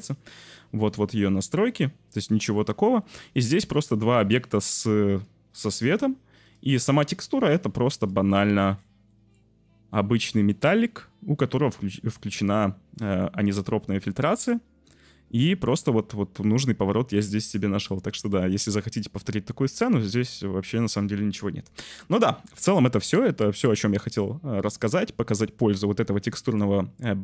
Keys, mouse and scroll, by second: 0.6 middle click, 1.1 middle click, 2.1 middle click, 7.4-8.0 drag, 9.0 middle click, 10.5 middle click, 13.0 middle click.